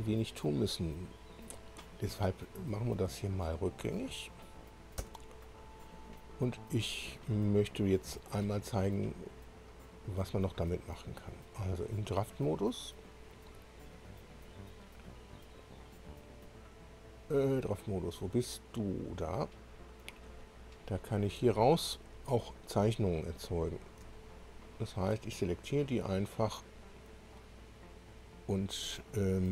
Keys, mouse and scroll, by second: 2.9-3.5 scroll down 4, 3.9 click, 5.0 Delete, 6.1 scroll up 2, 6.9 scroll down 2, 11.2 click, 18.9 click, 20.1 click, 21.0 click, 23.5-24.0 scroll down 1, 24.6 shift+click, 27.3-28.8 drag.